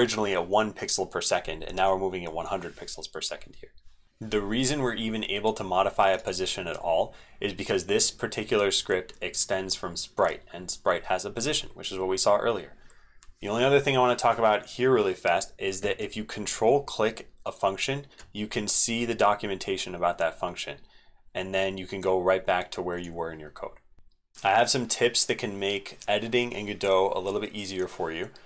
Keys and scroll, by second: 4.0 ctrl+v, 4.0 ctrl+x, 4.0 super+2, 4.0 ctrl+s.